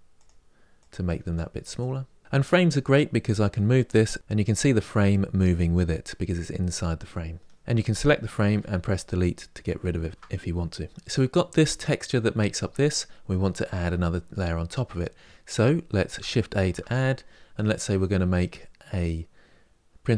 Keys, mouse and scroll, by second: 1.5 drag, 2.7 click, 8.2 Delete, 9.7 ctrl+z, 10.9 click.